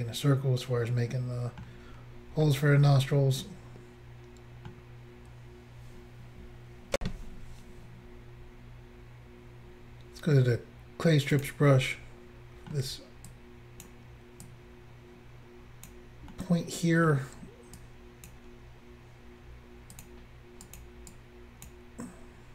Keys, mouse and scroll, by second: 2.0-2.9 scroll down 2, 2.9 middle click, 7.0 Insert, 11.4 click, 11.5 click, 11.8 middle click, 13.3 click, 14.5 click, 16.4 middle click, 17.8 click, 20.0 click, 20.1 click, 20.7 click, 20.8 click, 21.1 click.